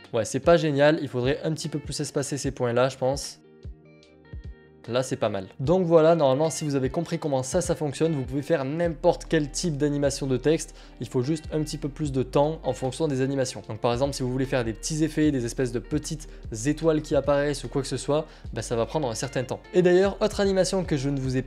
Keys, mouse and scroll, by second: 1.5 click, 2.1 click, 3.0 click, 4.8 click, 5.5 click, 9.2 click, 19.6 click.